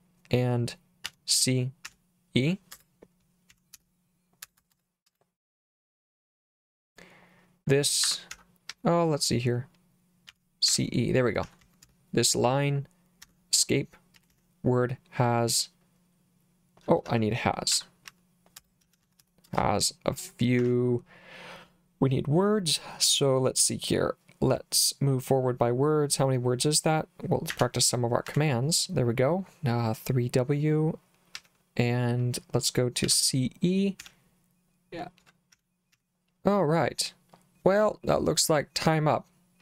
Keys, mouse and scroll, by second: 1.1-5.1 typing, 8.1 Escape, 8.3 h, 8.7 l, 10.3-12.4 typing, 13.3 Escape, 14.2 w, 14.3 w, 16.9-19.7 typing, 20.6 Escape, 27.5 3, 28.3 w, 31.4 l, 33.1-36.4 typing, 39.0 scroll up 2, 39.2 scroll down 2.